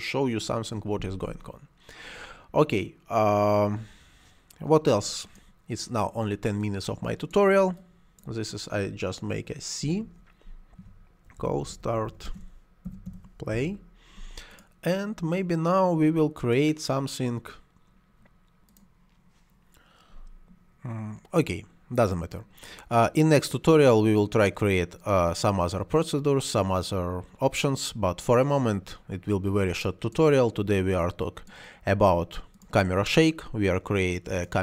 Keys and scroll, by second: 9.7 c, 11.0-13.9 typing.